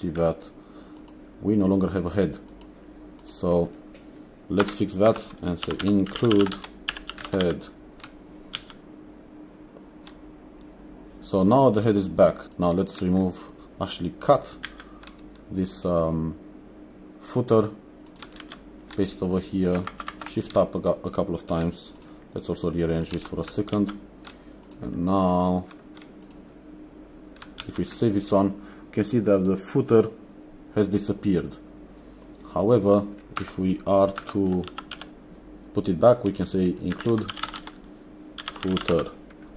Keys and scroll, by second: 4.7 Return, 5.4-8.0 typing, 8.6 ctrl+s, 12.4 ctrl+s, 14.7 ctrl+x, 18.5 ctrl+v, 23.2 space, 23.8 ctrl+s, 27.7 ctrl+s, 35.0 n, 36.8-39.5 typing.